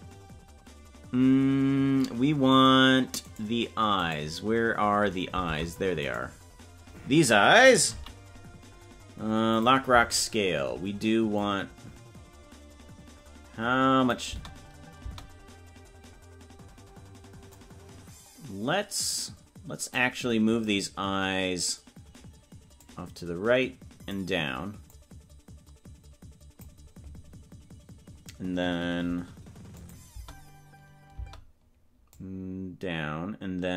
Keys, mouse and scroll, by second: 1.1 ctrl+s, 2.7 right click, 3.5 right click, 5.7 ctrl+Tab, 6.3-7.9 right drag, 7.9 i, 11.5-14.6 drag, 14.3 space, 17.6 click, 22.8-24.2 drag, 24.8-26.7 drag, 29.9 click, 30.2 space, 32.3-33.7 drag.